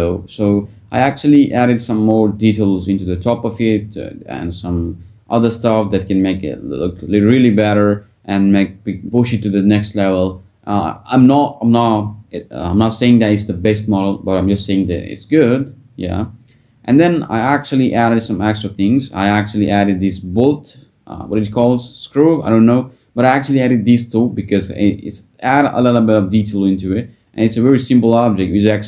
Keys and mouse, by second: 1.7 middle drag, 3.7 click, 6.4 click, 9.1 shift+d, 9.4 click, 9.9 p, 11.4 Tab, 11.8 click, 15.5 ctrl+j, 15.9 Tab, 17.0 /, 20.0 s, 22.3 r, 22.4 r, 25.3 drag, 25.9 s, 26.3 click.